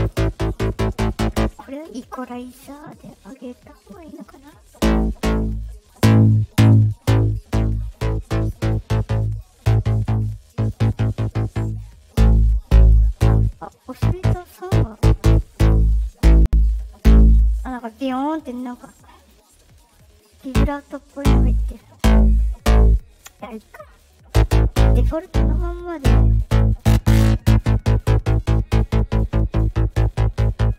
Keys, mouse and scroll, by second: 0.0 click, 3.8 right click, 4.3 click, 5.5-8.4 drag, 8.6 right click, 9.2 click, 10.0 right click, 10.5 click, 11.7-18.5 drag, 18.6 right click, 19.1 click, 19.9-22.9 drag, 23.9 click, 26.5-30.7 drag.